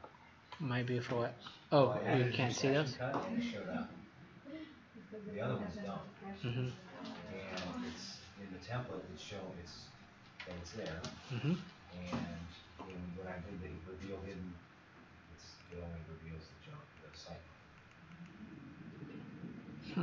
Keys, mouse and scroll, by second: 11.1-11.5 scroll down 6, 11.9-12.2 scroll down 3, 12.8 click, 18.0 click.